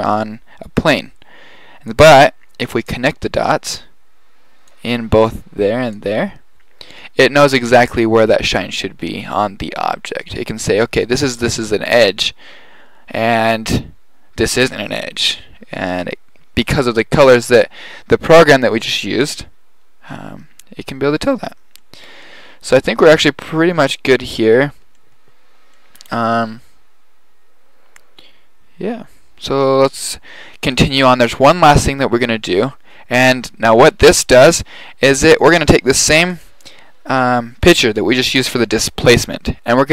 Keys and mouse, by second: 1.9-2.7 drag, 33.3-34.3 drag, 34.4 click, 35.5-36.1 middle drag, 36.3 right drag, 36.6 middle click.